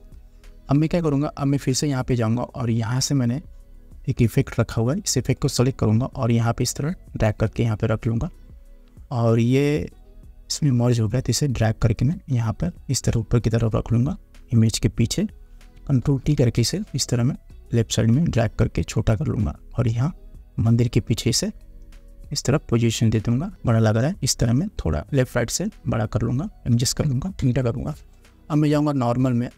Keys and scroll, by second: 16.2 ctrl+t, 27.6 Return.